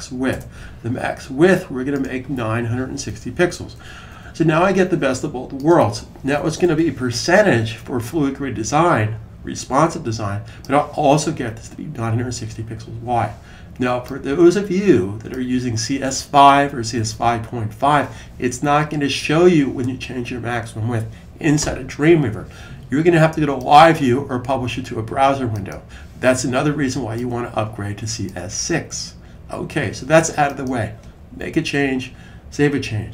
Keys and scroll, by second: 2.7-3.9 typing, 6.5 super+s.